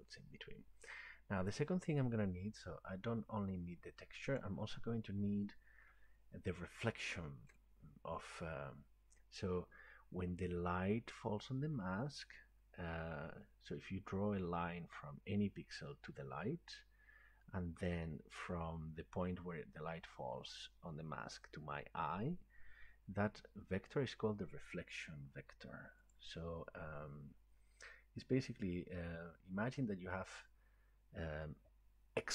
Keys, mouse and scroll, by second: 0.3-1.8 scroll, 4.4 click, 7.6 right click, 26.2 click.